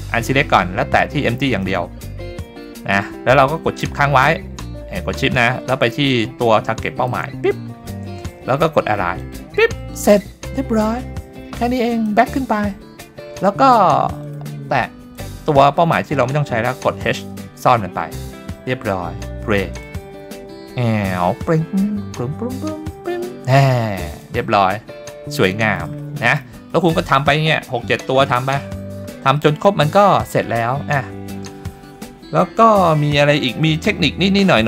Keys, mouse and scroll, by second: 1.5 click, 3.0 middle drag, 7.1 shift+click, 9.2 click, 10.7-11.9 scroll down 2, 11.9 click, 13.3 middle click, 14.2 click, 15.1 click, 17.2 h, 18.6-19.3 scroll down 1, 19.7 click, 24.1 click, 24.5-25.2 scroll up 3, 25.3-25.8 shift+middle drag, 26.0 middle drag, 26.4 shift+middle drag, 29.4 middle click, 29.8 shift+scroll up 1, 29.9 shift+middle drag, 30.4-30.7 scroll up 2, 33.7 click.